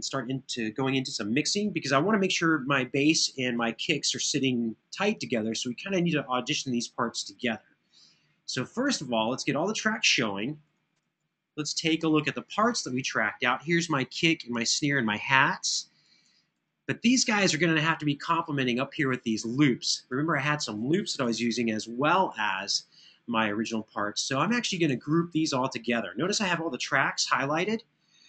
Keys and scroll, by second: 11.2 ctrl+alt+…, 21.0 super+[, 21.2 super+[, 26.7 super+=.